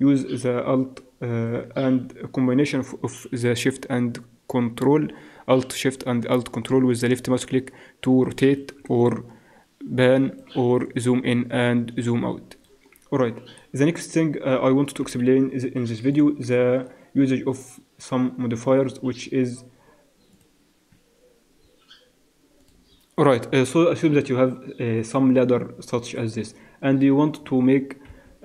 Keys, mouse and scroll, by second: 7.7 drag, 7.9-15.0 middle drag, 15.0 KP_1, 16.0 x, 16.7 shift+a, 26.1-26.7 drag, 27.9 click, 28.1 KP_3.